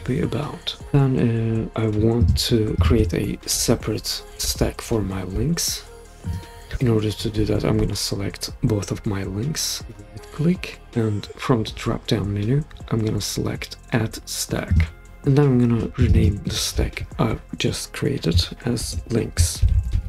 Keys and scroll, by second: 18.7-20.0 typing.